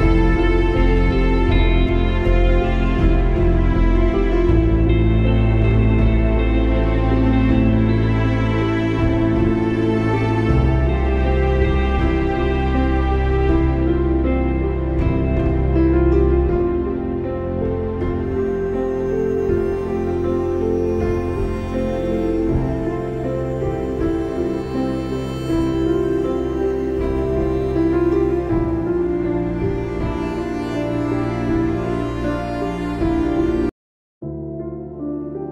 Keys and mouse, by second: 1.4-5.8 drag, 6.9 click, 7.0 space, 7.2 click, 7.5 space, 9.6 click, 9.7 space, 9.9 click, 10.1 space, 11.7-16.4 drag, 19.0 click, 20.0 click, 21.0 click, 27.1 click, 30.3 click, 31.4 space, 31.6 click, 32.5 click, 32.8 click.